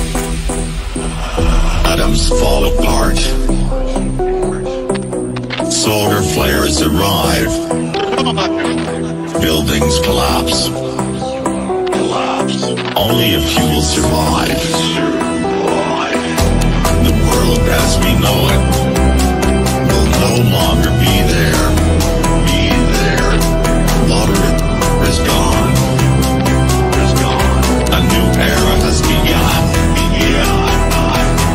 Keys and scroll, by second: 6.0 Escape.